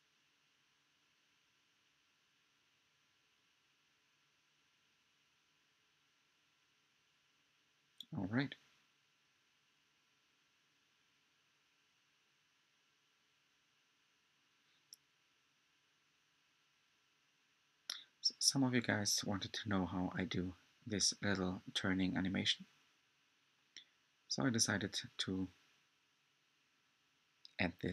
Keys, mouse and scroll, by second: 13.0 Tab, 14.4-17.8 middle drag, 17.8-18.2 scroll down 1, 19.4-21.8 middle drag, 19.4 click, 22.7 click, 25.7 click, 27.1 click.